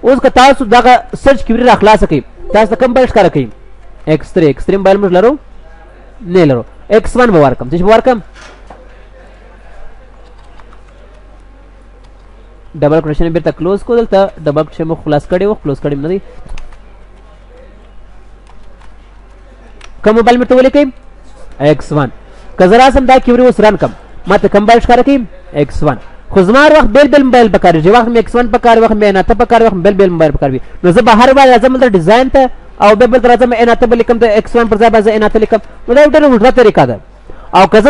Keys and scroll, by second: 0.5 ctrl+w, 19.3 ctrl+s, 23.3 ctrl+w.